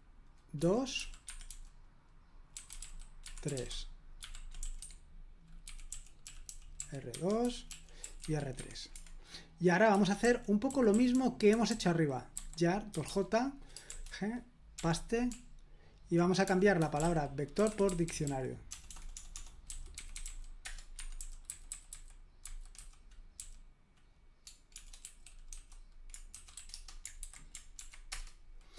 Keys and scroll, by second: 0.0-8.7 typing, 4.8 Escape, 9.9-23.4 typing, 24.5-27.0 typing, 27.2 super+h, 27.8 ctrl+p, 28.1 Return, 28.1 typing.